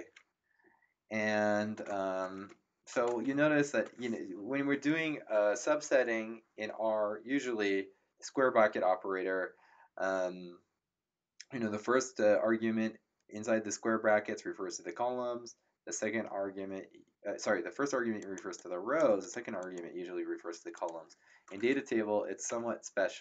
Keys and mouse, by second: 18.2 click, 20.7 click, 22.4 Return.